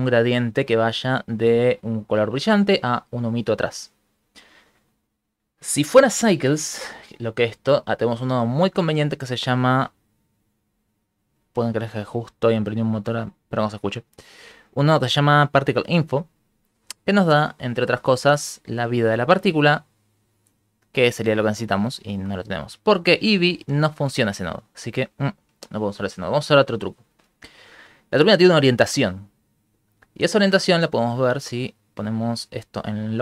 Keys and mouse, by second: 8.7 shift+a, 17.2 ctrl+middle click, 17.7 middle click, 18.1 middle click, 18.3 ctrl+middle click, 18.8 click, 20.3 click, 21.8 x, 22.2 middle click, 27.5 Escape, 29.5 right click, 31.8 click.